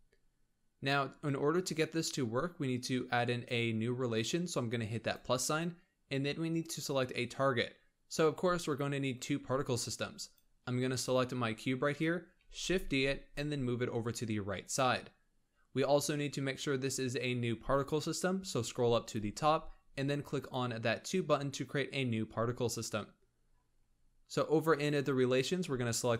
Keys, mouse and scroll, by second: 5.0-8.0 drag, 10.2 click, 10.6-11.2 scroll down 2, 12.4 shift+d, 18.3-20.4 scroll up 14, 20.4-23.2 drag, 23.2-24.7 scroll down 13, 24.7 click.